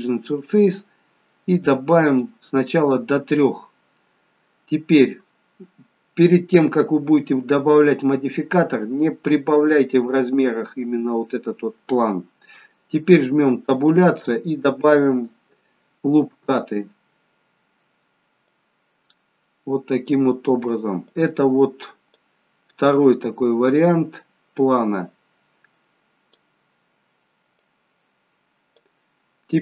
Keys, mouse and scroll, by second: 1.7 click, 2.1 click, 13.3 Tab, 15.4 click, 20.1 click, 21.2 click, 24.0 click, 27.6 click.